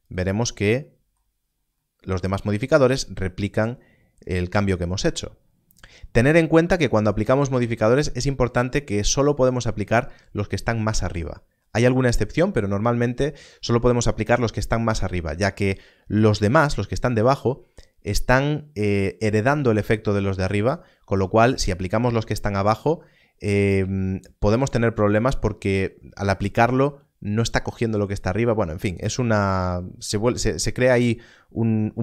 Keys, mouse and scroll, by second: 1.2-1.8 scroll down 1, 6.9 click.